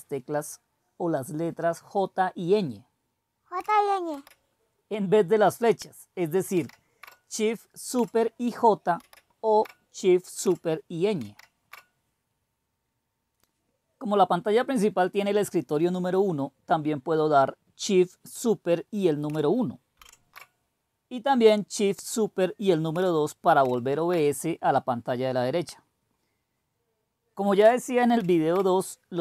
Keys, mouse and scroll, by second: 4.1 super+j, 6.5 super+ñ, 9.0 super+j, 11.2 super+ñ, 19.9 super+!, 23.6 super+", 28.1 super+".